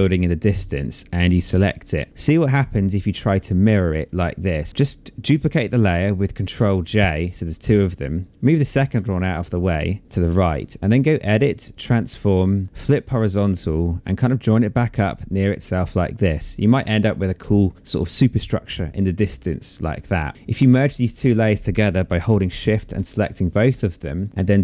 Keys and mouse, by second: 0.3 click, 5.9 ctrl+j, 7.3 click, 10.2 click, 11.3 click, 14.8 click, 20.3 click, 21.7 shift+click, 24.3 right click.